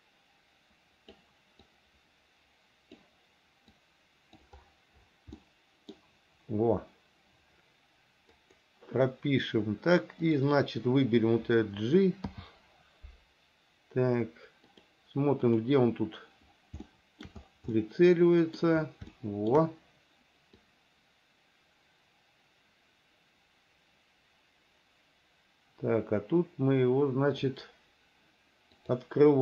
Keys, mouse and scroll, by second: 1.9-3.2 drag, 4.0 click, 5.5 middle click, 8.6 click, 10.4 click, 12.5 g, 15.7 click, 17.1 shift+middle click, 18.0 middle click, 19.3 shift+middle click, 20.9-27.7 drag, 29.0 click.